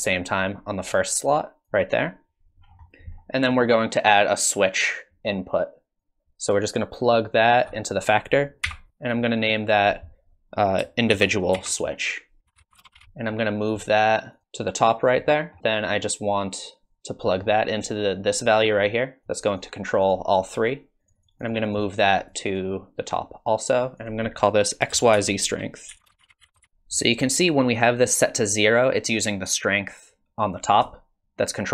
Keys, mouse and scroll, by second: 0.4 click, 2.6 scroll down 4, 2.9 middle click, 4.6 click, 6.0 click, 8.6 n, 8.9 scroll down 10, 9.0 click, 9.6 click, 14.2 click, 14.3 click, 15.3 middle click, 15.6 middle click, 15.6 scroll up 4, 15.7 click, 16.9 middle click, 17.2 middle click, 19.2 click, 20.0-21.8 click, 21.0 click, 21.2 click, 21.5 click, 21.7 click, 22.0 click, 22.2 click, 22.5 click, 24.0 click, 26.5 BackSpace, 28.9 click.